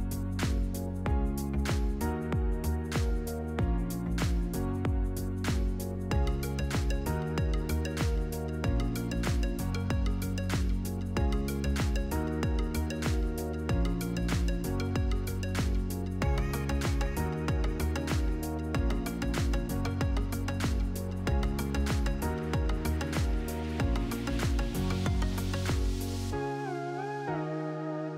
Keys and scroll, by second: 1.4 1, 2.0 Tab, 4.3 8, 4.6 Return, 10.6 2, 10.9 Return, 14.5 2, 15.1 Return, 18.1 ctrl+-, 19.3 ctrl++, 25.6 ctrl+-, 27.2 ctrl++.